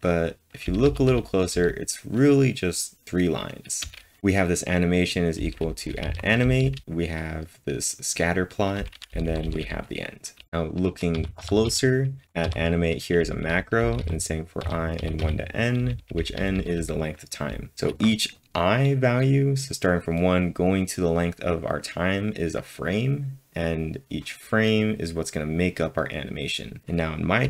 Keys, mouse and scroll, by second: 0.0-2.0 typing, 3.8 typing, 5.4-6.9 typing, 9.4-10.4 typing, 15.8-16.5 typing, 17.7 typing.